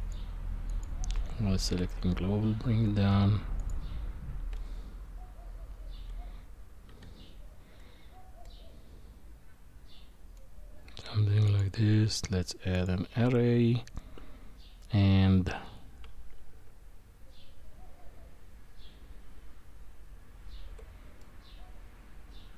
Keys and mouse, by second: 1.7 g, 4.5 KP_1, 6.9 KP_3, 8.4-10.4 middle drag, 11.6-12.9 drag, 21.2-22.5 middle drag.